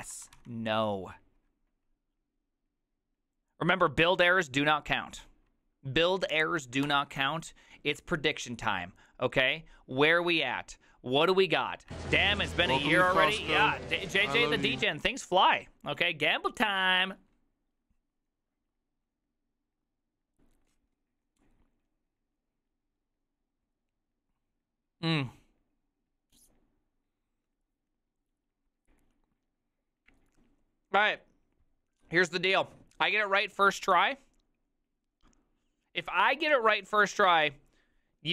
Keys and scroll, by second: 0.0-0.9 typing, 2.8-3.5 typing, 7.0 alt+f.